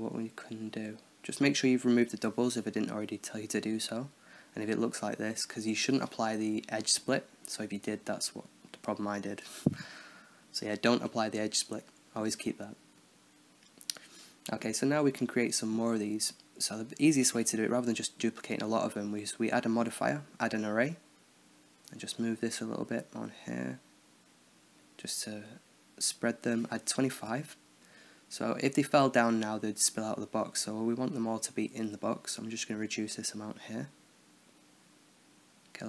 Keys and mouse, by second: 0.2-2.6 drag, 3.0 t, 4.3-6.1 middle drag, 5.5 z, 5.8 z, 6.1 Tab, 6.5-7.8 middle drag, 7.8-9.7 drag, 11.5-13.3 middle drag, 13.5-17.5 middle drag, 17.7 KP_1, 19.0-20.5 drag, 20.5-21.7 middle drag, 21.7-25.6 drag, 26.8-28.2 middle drag, 29.0-30.1 drag, 30.5-33.8 drag, 34.0-35.1 middle drag, 35.4 KP_7.